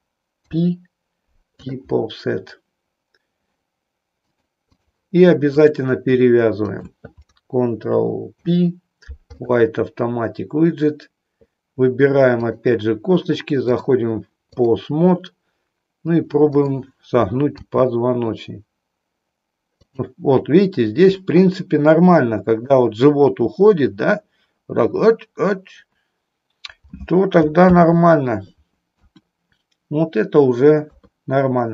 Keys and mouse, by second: 0.3 ctrl+p, 4.3 click, 5.6 click, 6.6 shift+click, 8.3 ctrl+p, 12.4 click, 13.6-14.6 drag, 16.5 click, 17.6 r, 19.9 click, 21.1-22.8 middle drag, 27.6 ctrl+z, 28.9 KP_1.